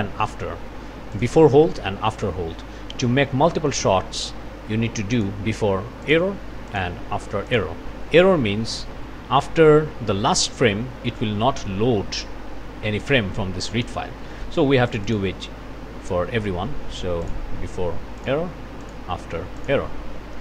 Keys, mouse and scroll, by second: 1.2 click, 5.2 click, 6.0 click, 6.7 click, 7.5 click, 14.2 click, 14.9 click, 17.2 click, 18.2 click, 18.8 click, 19.6 click.